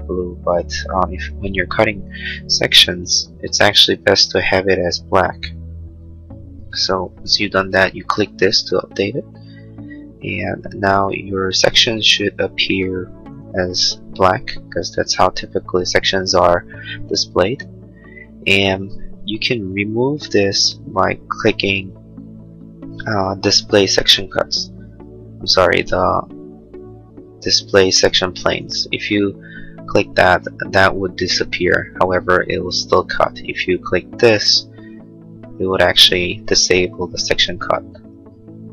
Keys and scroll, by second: 11.1 space, 14.5 space.